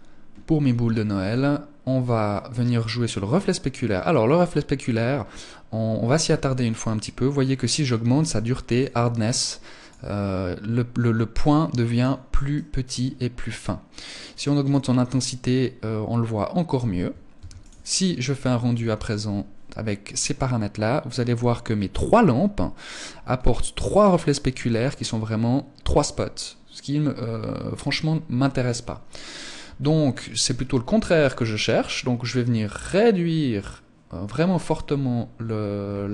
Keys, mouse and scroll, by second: 1.7-3.3 scroll down 1, 3.3 scroll down 1, 6.1 click, 7.7 click, 10.9 click, 11.9 click, 13.8 click, 16.8 ctrl+s, 29.1 Escape, 30.6 click, 34.2 click.